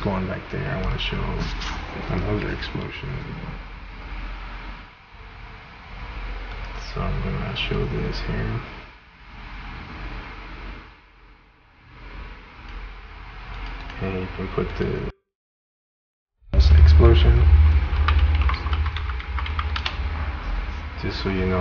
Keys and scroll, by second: 16.8-20.0 typing.